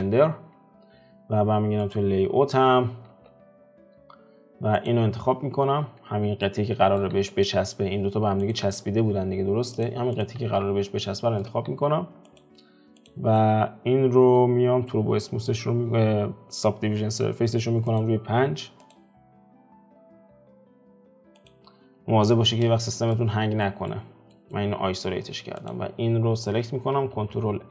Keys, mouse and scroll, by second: 1.8 click, 3.1 alt+q, 3.6-4.9 scroll down 3, 4.9 click, 5.4 alt+q, 6.1-6.4 scroll down 3, 6.4 middle click, 7.2 alt+q, 7.4 middle click, 7.9-8.3 scroll up 4, 8.5 shift+click, 8.8 alt+q, 9.8 click, 10.2 click, 10.4 alt+q, 11.1 shift+middle click, 11.4 scroll up 1, 11.7 alt+q, 12.4 click, 13.1 click, 13.4-18.5 middle drag, 18.5-21.5 drag, 22.3 F4, 23.1-25.7 middle drag, 25.7 click.